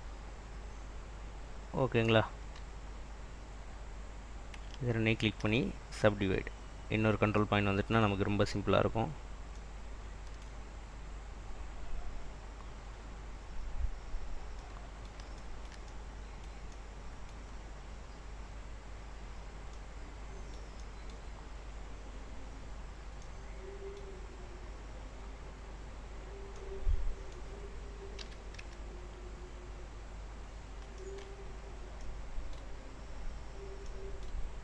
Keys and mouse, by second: 2.2 click, 2.5 g, 4.7 shift+middle click, 5.3 shift+click, 5.4 shift+middle click, 5.8-7.1 drag, 10.8 click, 11.7 click, 13.0 click, 15.4 shift+middle click, 19.8 middle click, 20.9 middle click, 23.3 middle click, 26.6 middle click, 28.3 r, 28.7 z, 30.3 click, 31.1 shift+click, 31.7 click, 33.1 click.